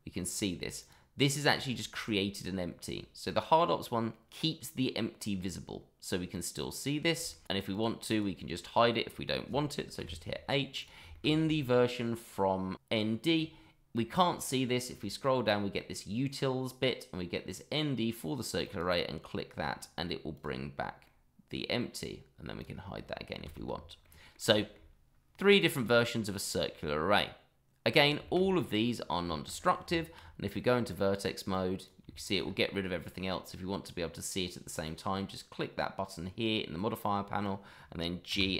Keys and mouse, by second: 0.3 click, 0.8 click, 1.7 shift+middle drag, 7.3 shift+middle click, 7.7 click, 8.1 click, 10.0 h, 10.8 click, 11.1 shift+middle drag, 18.6 click, 20.3 click, 21.0-21.5 middle drag, 22.6 click, 23.4 shift+z, 24.0-24.3 middle drag, 24.5 shift+middle drag, 27.9 click, 28.2 shift+middle click, 28.8 middle drag, 29.3 shift+middle drag, 29.8 Tab, 30.5-30.9 middle drag, 31.5-31.8 drag, 32.1 shift+middle drag, 32.7-33.0 middle drag, 34.7 click, 37.4 middle drag, 38.3 g.